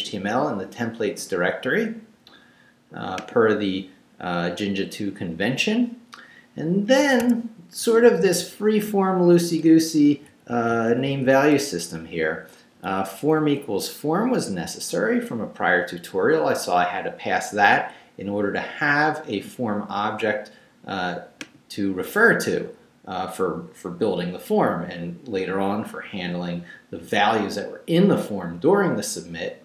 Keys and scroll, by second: 7.0 ⟲, 7.8 Right, 11.6 Left, 12.9 Left, 13.4 Right, 14.6 Right.